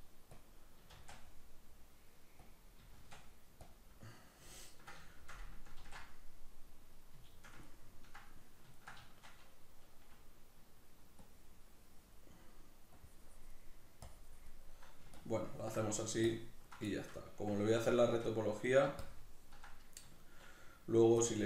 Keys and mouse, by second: 6.4 ctrl+r, 7.0-11.2 middle drag, 11.2-12.6 drag, 12.6 middle click, 13.0 click, 13.6 middle click, 14.1 click, 14.6 middle click, 15.2 ctrl+click, 15.9 middle click, 16.3 ctrl+click, 16.9-19.0 shift+middle drag, 19.0 ctrl+click, 19.7-21.2 middle drag, 21.2 ctrl+click.